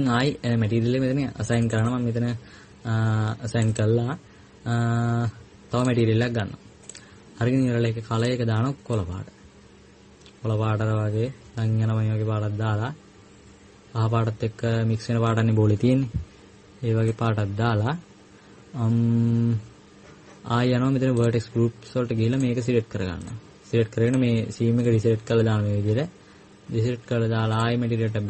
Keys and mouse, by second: 6.6-28.2 drag.